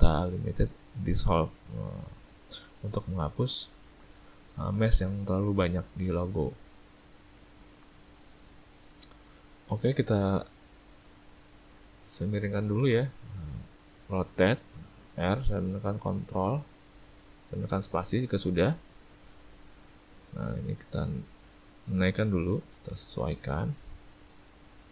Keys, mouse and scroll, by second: 4.6 middle click, 5.1 middle click, 5.6 middle click, 6.3 Tab, 6.8 middle click, 7.3 a, 7.5 a, 7.8 middle click, 8.2 middle click, 8.8 click, 9.1 ctrl+middle click, 9.3 ctrl+middle click, 9.7 ctrl+middle click, 12.9 r, 19.2 middle click, 20.2 middle click, 22.2 click, 23.8 click.